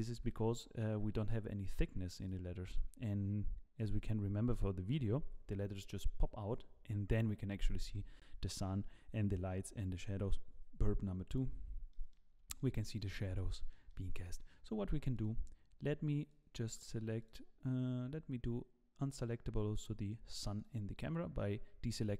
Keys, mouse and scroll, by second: 0.2 z, 0.6 middle click, 1.0 scroll down 5, 1.3 middle click, 2.2 click, 11.9 middle click, 12.3-12.6 scroll up 2, 12.6 middle click, 13.3 shift+middle click, 13.7 middle click, 14.2 middle click, 15.1 click, 16.2 click, 17.2 click, 20.3 click, 21.3 click.